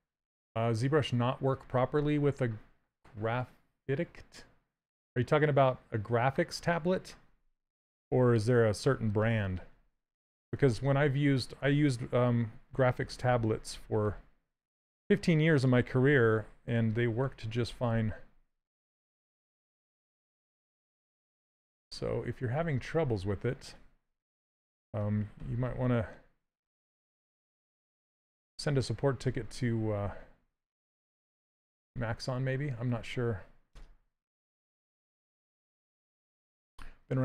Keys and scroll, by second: 11.3 s, 31.6 s.